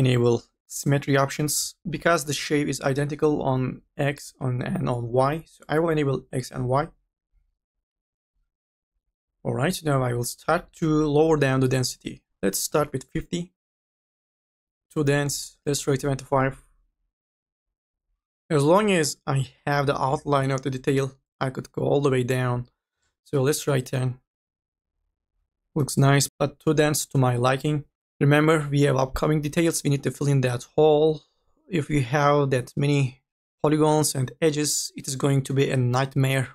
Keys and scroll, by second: 12.7 5, 13.0 KP_0, 15.2 KP_2, 15.5 KP_5, 23.3 KP_1, 23.3 KP_0.